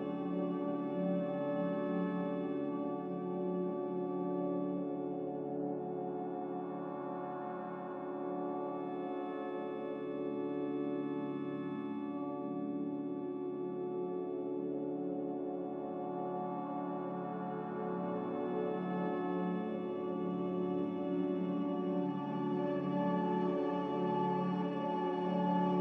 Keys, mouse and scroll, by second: 10.5 z, 16.8-17.6 typing, 19.1 ctrl+z, 24.9 5, 25.1 Return.